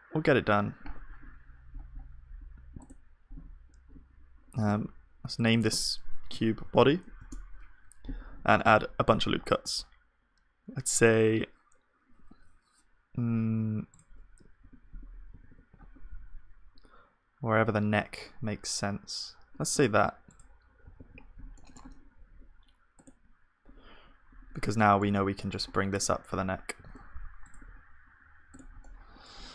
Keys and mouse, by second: 1.1 click, 3.5-4.8 drag, 3.5-4.8 right drag, 8.5 ctrl+r, 14.7-16.2 right drag, 14.7 KP_1, 15.4 ctrl+r, 23.0 ctrl+s, 23.0-25.0 drag, 23.0-24.3 middle drag, 24.8 right click, 25.0-27.7 middle drag, 26.8-28.5 drag, 26.8 g, 27.7 e.